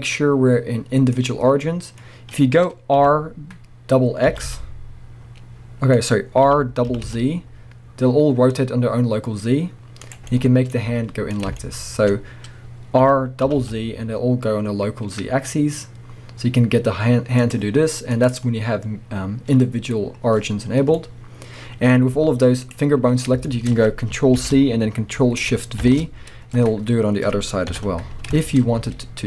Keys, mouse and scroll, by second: 1.5 scroll down 2, 1.6-6.1 middle drag, 2.0-2.3 scroll up 2, 3.0 r, 6.1 right click, 6.5 r, 10.1 click, 10.3-17.1 middle drag, 10.8 z, 11.5 shift+scroll up 1, 12.1-13.0 scroll up 2, 13.0 r, 17.5 click, 18.1-20.9 drag, 20.6-20.9 scroll down 1, 20.9 middle click, 21.9 scroll up 1, 22.1 z, 23.5 shift+middle click, 24.4 ctrl+c, 25.8 ctrl+shift+v, 26.6-27.7 scroll down 1, 27.7 KP_1, 28.4 shift+middle click, 28.6 scroll up 1, 28.8 z.